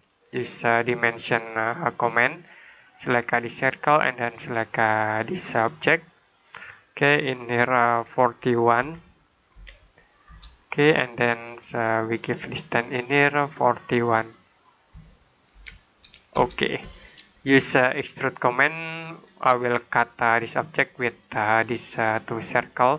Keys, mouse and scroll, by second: 1.9 click, 8.6-9.4 typing, 10.1 Return, 11.9 click, 14.8-15.4 typing, 16.2 Return, 18.0 click.